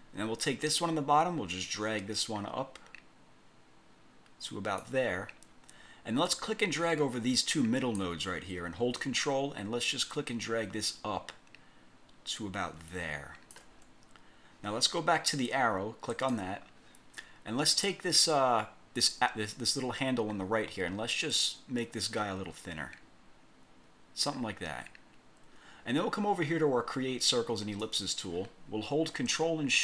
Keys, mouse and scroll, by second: 0.9-5.1 ctrl+drag, 6.4-8.3 drag, 10.3-13.9 ctrl+drag, 16.3 click, 21.4-24.5 drag, 27.9 click.